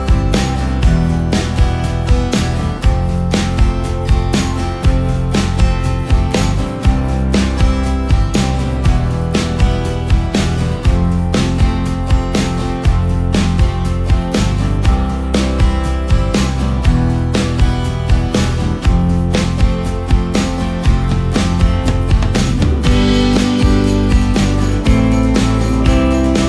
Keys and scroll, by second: 2.6 ctrl+alt+space, 11.5 ctrl+space, 16.6 space, 25.0 i, 25.9 ctrl+space.